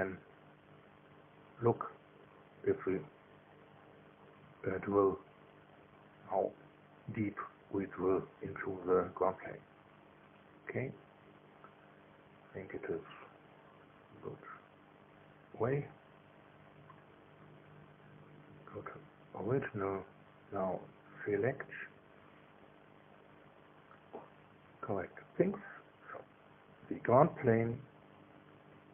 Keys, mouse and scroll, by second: 1.2 middle click, 2.3 scroll down 1, 2.8 scroll up 1, 6.9 scroll up 1, 9.6 scroll up 1, 14.1 middle click, 17.3 click, 18.6 click, 19.5-22.7 middle drag, 22.7 click, 26.9 click, 28.2-28.7 scroll down 1, 28.7-28.9 scroll up 1.